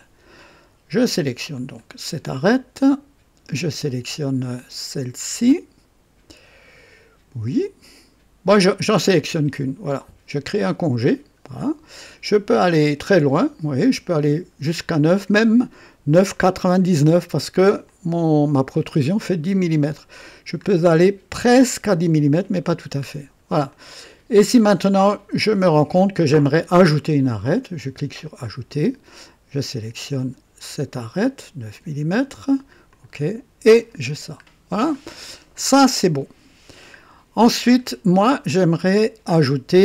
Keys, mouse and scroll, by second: 1.5 click, 2.7 ctrl+click, 10.5 ctrl+click, 12.4 scroll up 2, 12.9-13.2 scroll up 2, 13.9-14.3 scroll up 2, 15.6 scroll up 2, 17.8-18.8 drag, 19.8 click, 20.6-20.9 scroll up 1, 23.0-23.3 scroll down 1, 23.7-24.8 drag, 24.9-25.8 drag, 28.2 click, 30.8 click, 32.9 click, 34.0-34.4 scroll down 2, 34.9-36.9 drag, 37.4 scroll up 2.